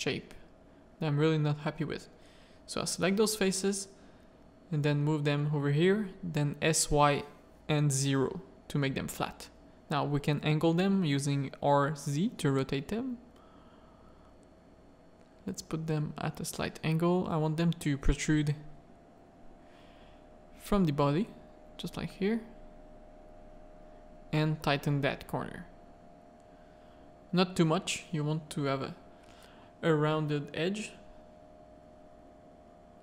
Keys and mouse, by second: 0.3 shift+click, 1.6 shift+click, 3.2 middle click, 3.7 shift+middle click, 4.8 click, 5.2 s, 7.2 middle click, 8.2 1, 8.6 middle click, 9.0 r, 10.5-12.5 drag, 13.0 middle click, 13.5 r, 15.1-16.8 drag, 17.1-19.5 middle drag, 20.1 click, 20.9 r, 22.8 middle click, 23.3 ctrl+r, 25.8 middle click, 27.0-29.0 middle drag, 30.8 middle click, 31.3 middle click, 31.8 g.